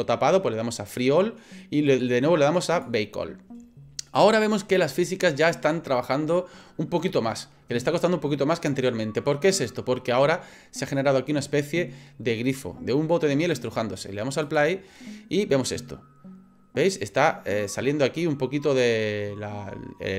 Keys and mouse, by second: 2.8-9.5 drag, 14.4 click.